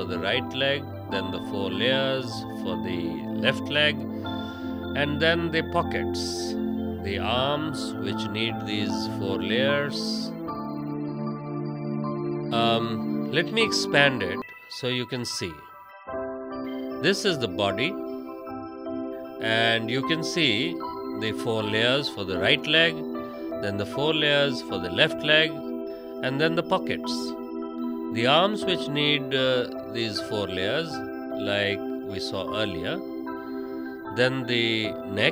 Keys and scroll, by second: 1.5 space, 2.5 v, 3.1 space.